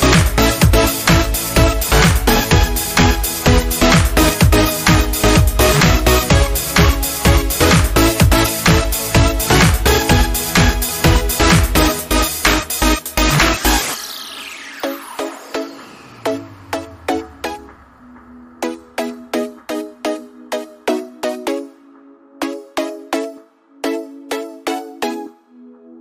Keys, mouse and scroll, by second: 0.0-0.2 typing, 4.5-5.3 typing, 4.8 scroll up 1, 5.5 click, 6.6 shift+click, 11.2 click, 12.3-15.0 typing, 14.5 click, 16.9-23.9 drag, 24.8-25.5 typing, 25.0 click.